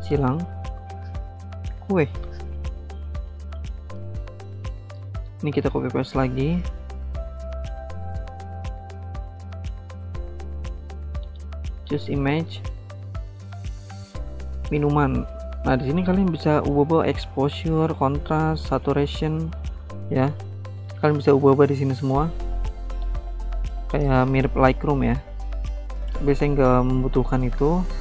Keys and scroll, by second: 1.2-2.3 typing, 3.9-4.7 typing, 5.1 ctrl+c, 5.2 ctrl+v, 21.1 ctrl+z, 22.2 ctrl+z, 23.1 ctrl+z, 27.8-28.0 typing.